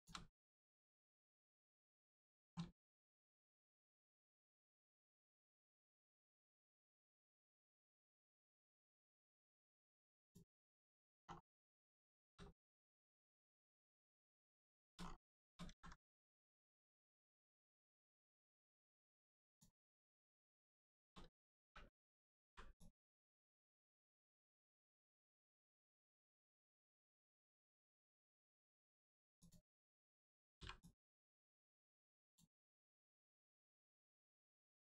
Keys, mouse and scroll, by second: 0.5 scroll down 1, 1.0 shift+middle click, 1.3 scroll up 1, 1.9-2.4 scroll down 1, 2.9 shift+middle click, 3.3 scroll down 1, 4.1 shift+middle click, 4.5 scroll up 1, 10.1 click, 11.2-11.5 scroll down 1, 11.6 middle click, 12.1 shift+middle click, 12.4-14.3 scroll up 1, 14.3 click, 14.7 shift+middle click, 15.0 scroll up 1, 16.2 middle click, 17.7 click, 18.1-19.4 scroll up 1, 19.4 click, 20.6 shift+middle click, 21.1 scroll up 1, 21.6 3, 22.4 b, 22.7 click, 24.8 middle click, 27.3 click, 27.8 Tab, 28.3 click, 30.8 click, 33.5 middle click, 34.0 shift+middle click, 34.7 scroll up 1.